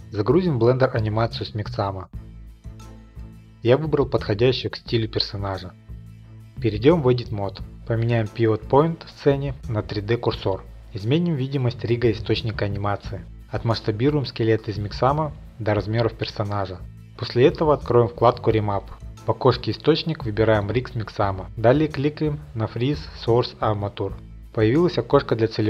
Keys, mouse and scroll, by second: 0.3 right click, 0.3 r.